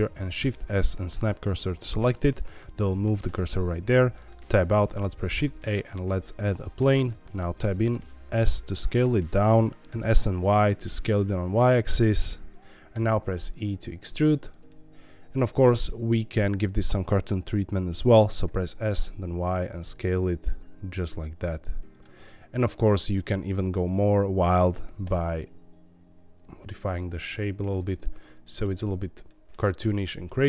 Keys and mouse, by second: 0.2 shift+s, 3.2 Tab, 4.1 middle click, 5.0 shift+a, 6.9 Tab, 7.9 s, 9.4 click, 9.8 ctrl+z, 9.9 s, 10.1 y, 12.5 click, 12.9 e, 14.4 click, 14.6-15.8 middle drag, 18.1 s, 18.4 y, 21.9 click, 22.7 click, 23.8 click, 24.8 g, 25.0 g, 27.6 alt+click, 27.8 middle click, 29.2 middle click, 30.2 middle click.